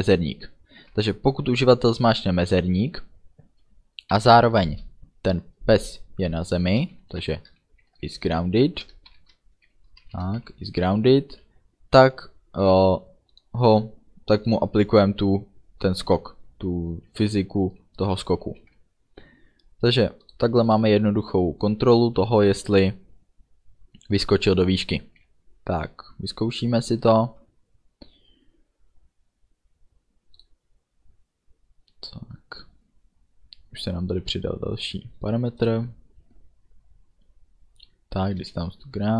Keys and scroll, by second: 1.0 space, 4.2 shift+7, 4.7 space, 7.4 shift+i, 7.7 s, 8.3 Return, 9.1 shift+9, 10.4 shift+0, 11.4 End, 18.6 ctrl+s.